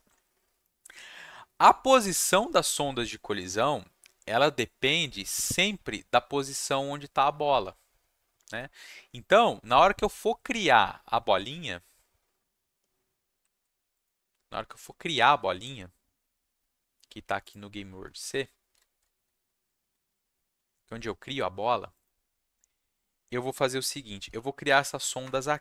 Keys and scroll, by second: 13.5 ctrl+shift+s, 24.2 ,, 25.2 Return.